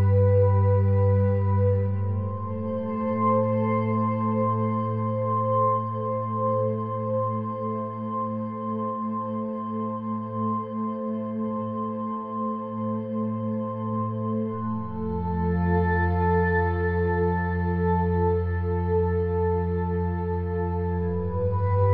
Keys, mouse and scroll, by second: 0.9 k, 2.4 middle click, 2.8 k, 4.9 k, 6.6-7.9 drag, 7.6 x, 8.3 middle click, 9.8 click, 10.4-11.6 drag, 11.8 s, 13.6 middle click, 15.1 a, 15.3 a, 15.5 e, 16.6 Tab, 16.8 click, 17.5 click, 18.7 click, 19.6 middle click, 20.0 click, 20.8 middle click, 21.6 Tab.